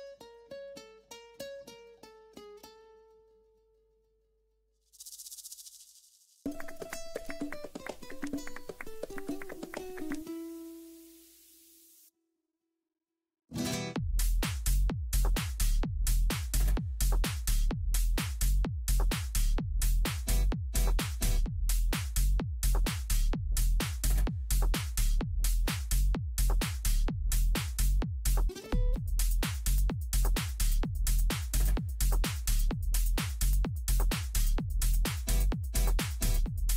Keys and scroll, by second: 14.9 Down, 15.9 Right, 16.6 Down, 25.8 ctrl+Page_Down, 27.6 ctrl+Page_Down.